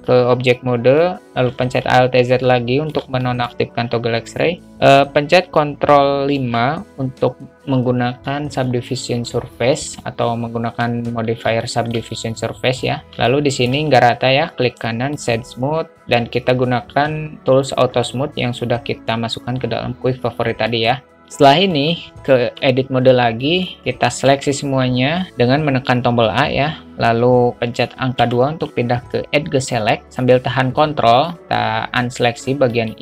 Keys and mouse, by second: 0.0 Tab, 1.8 alt+z, 2.3-3.2 middle drag, 3.3 shift+a, 3.5 shift+middle click, 3.7 shift+a, 6.7 ctrl+5, 11.7 shift+a, 12.0 shift+middle click, 12.1 shift+a, 13.4 shift+a, 13.6-14.0 alt+shift+middle drag, 14.9 right click, 16.0 q, 21.8 middle click, 22.7 Tab, 23.7 alt+middle click, 24.6 a, 25.2 a, 28.5 2, 32.3 ctrl+click.